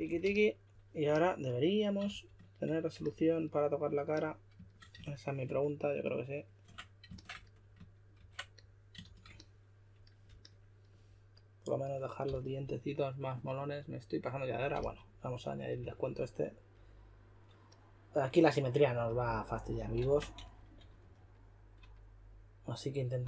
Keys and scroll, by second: 0.0-0.2 typing, 2.0 shift+f, 8.1 super+w, 9.0 shift+f, 12.2 typing, 14.7 typing, 15.8 typing, 20.0 super+z, 20.3-21.0 typing.